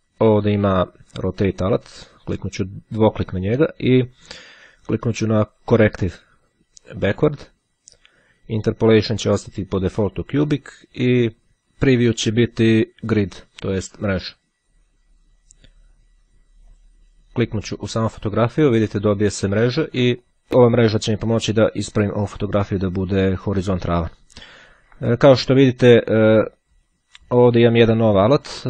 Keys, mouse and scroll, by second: 0.9-2.4 drag, 3.6-5.8 drag, 11.5-12.7 drag, 13.3 click, 16.3 click, 27.0 click, 28.0 click.